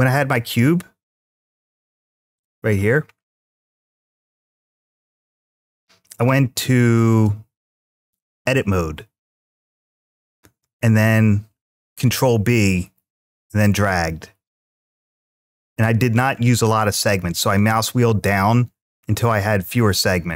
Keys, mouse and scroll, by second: 0.9 g, 1.4 x, 2.2 drag, 2.7-3.2 scroll up 5, 3.3-3.9 shift+middle drag, 3.9 shift+scroll up 1, 4.2-4.7 shift+middle drag, 5.1-5.7 scroll down 2, 5.6 scroll up 1, 7.0 g, 7.8 click, 8.6 Tab, 11.6 ctrl+b, 16.2-16.6 scroll up 1, 16.6-16.9 scroll down 1, 16.9-17.3 scroll up 1, 17.3-17.9 scroll down 2, 18.1 scroll down 1, 18.8 scroll down 1.